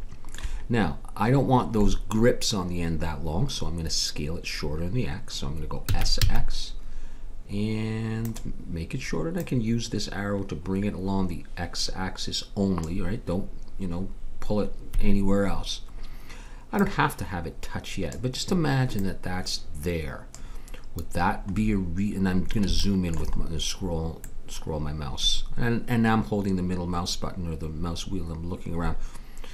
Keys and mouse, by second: 5.9 s, 9.3-11.1 drag, 16.7-21.5 drag, 22.2-26.1 middle drag.